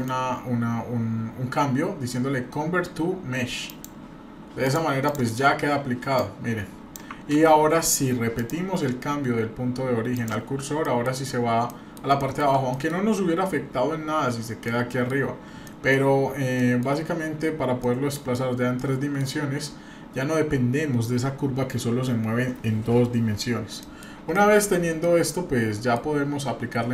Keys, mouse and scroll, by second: 1.2-4.6 right drag, 4.6 drag, 5.0 drag, 6.2-6.9 drag, 7.3 ctrl+z, 8.3-10.2 drag, 10.5-10.8 scroll down 3, 10.8 middle drag, 11.2 scroll up 2, 11.7 middle click, 12.2 shift+middle drag, 12.7 middle click, 14.7 middle click, 15.3 scroll up 2, 15.6 shift+middle click, 16.2-16.5 scroll up 1, 16.6 middle click, 17.3 scroll down 1, 17.8-18.3 middle drag, 18.4 scroll down 1, 18.8 middle click, 20.0 scroll up 1, 22.8 scroll up 1, 23.8 middle click, 24.3-24.6 shift+middle drag, 24.9 scroll down 1, 25.0-26.0 middle drag.